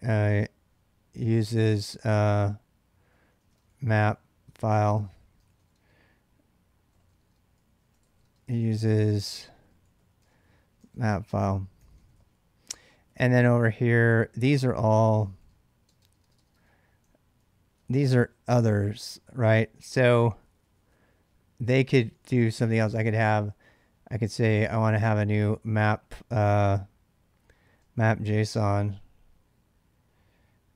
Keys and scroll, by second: 0.0-16.5 typing, 17.7 ctrl+[, 17.9 ctrl+j, 18.3-19.4 typing, 21.5-26.0 typing, 27.5-28.5 typing.